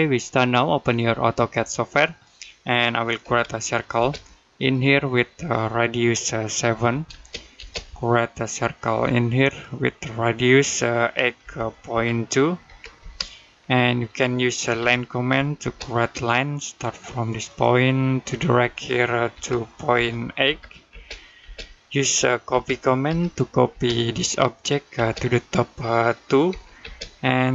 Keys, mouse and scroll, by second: 3.1 c, 3.8 space, 4.4 click, 6.6 7, 6.9 space, 9.3 click, 11.2 typing, 12.8 space, 13.5 middle click, 14.6 l, 15.4 space, 17.3 click, 19.2 typing, 21.5 middle click, 22.3 typing, 23.5 space, 24.0 click, 24.8 space, 25.0 click, 26.3-26.6 typing.